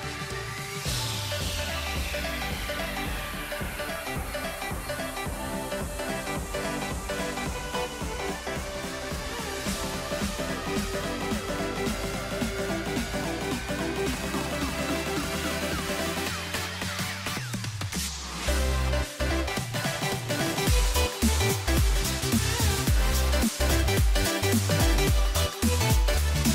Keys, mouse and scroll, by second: 2.0-4.3 typing, 6.3 g, 7.1 a, 7.2 a, 10.2 ctrl+r, 11.3 ctrl+r, 12.2 ctrl+r, 13.2 ctrl+r, 14.1 ctrl+r, 15.2 ctrl+r, 15.9 ctrl+r, 16.8 middle click, 17.6 s, 21.2-23.3 scroll up 1, 23.3 z, 24.5 g, 25.7 s.